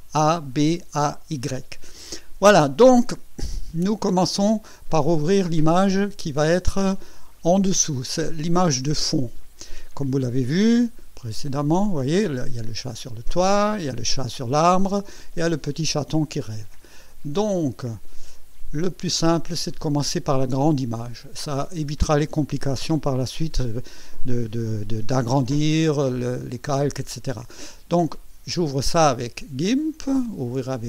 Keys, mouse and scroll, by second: 11.2 click, 18.3 click, 28.6 right click.